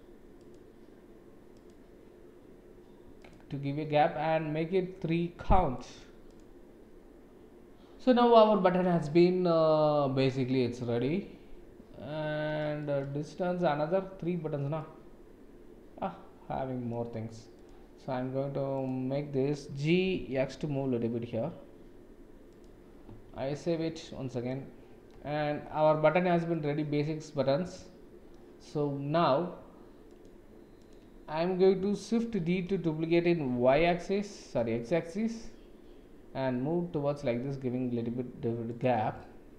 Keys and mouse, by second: 0.3 click, 1.5 click, 3.3 click, 6.2 click, 12.9 shift+middle click, 14.8-16.9 middle drag, 17.5 click, 18.7 click, 20.0 g, 23.4 ctrl+s, 24.0-24.4 middle drag, 26.5-28.4 middle drag, 30.0 click, 30.8 click, 32.7 shift+d, 39.1-39.5 middle drag.